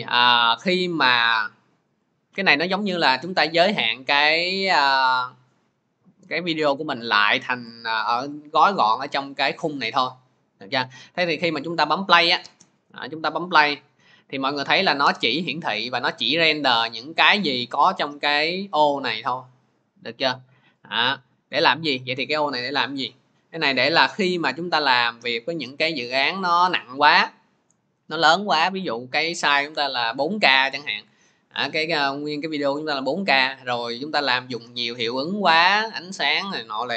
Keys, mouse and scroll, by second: 12.2-17.3 drag.